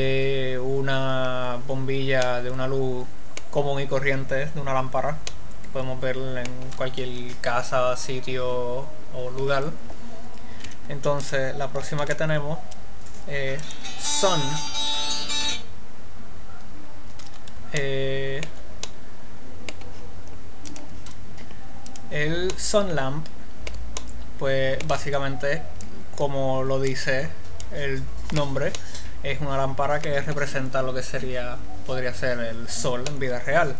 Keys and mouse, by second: 2.6 middle click, 10.9 x, 12.3 shift+a, 17.6 middle click, 23.1 middle click, 26.2-27.2 middle drag, 29.4-31.2 middle drag, 33.6 middle click.